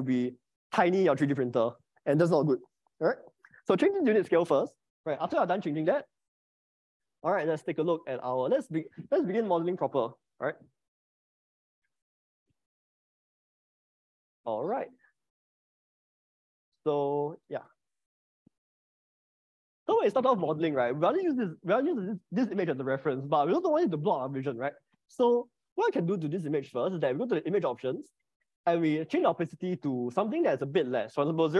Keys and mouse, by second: 8.0 shift+middle click, 15.6 click, 16.8 middle click, 19.3 click, 26.7 click, 30.3-31.5 drag.